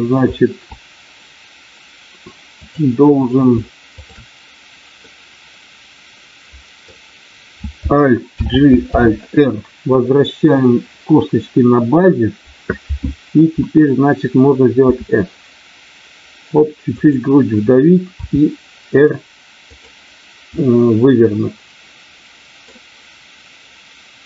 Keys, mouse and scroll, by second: 2.7 click, 5.1-6.9 middle drag, 8.3 alt+g, 8.8 alt+r, 16.9 click, 18.0 r, 19.7 click, 20.4-22.7 middle drag.